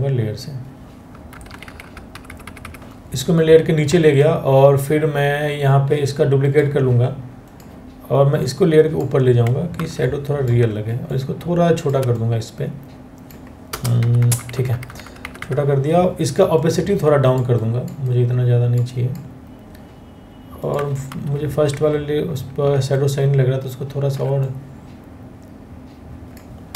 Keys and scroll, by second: 0.9 Down, 1.1 Down, 1.3 Down, 1.4 Down, 1.8 Right, 1.9 Right, 2.2 Right, 9.4 ctrl+t, 13.3-14.5 Return, 13.8 Down, 13.9 Down, 14.1 Down, 14.3 Down, 14.6 Return, 14.8 Return, 20.7 ctrl+t, 26.4 Return.